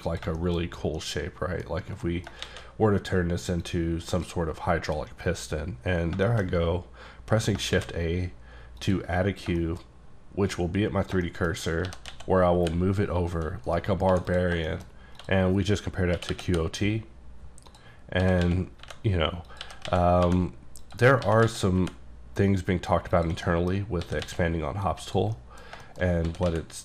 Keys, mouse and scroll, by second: 0.1 click, 0.4 shift+middle click, 0.7-1.0 scroll up 2, 1.0 middle click, 2.1 middle click, 2.2 scroll down 2, 2.5 shift+a, 3.7 click, 6.0 scroll down 2, 6.3 shift+middle click, 7.8 shift+a, 8.8 click, 9.4 scroll down 2, 9.6 shift+middle click, 10.0-11.2 scroll up 1, 11.2 shift+scroll up 1, 11.3 shift+middle click, 11.9 g, 12.1 x, 12.6 y, 13.7 right click, 14.1 x, 14.3 click, 14.7 shift+middle click, 15.2 click, 16.2 q, 16.3 o, 16.5 t, 17.7 click, 18.1 scroll up 2, 18.2-20.2 typing, 19.5 click, 20.8 click, 21.3 s, 21.4 x, 21.8 y, 23.1 click, 23.5 middle click, 24.1 s, 25.4 middle click, 25.8 shift+middle click, 26.1 scroll up 1, 26.3-26.8 typing.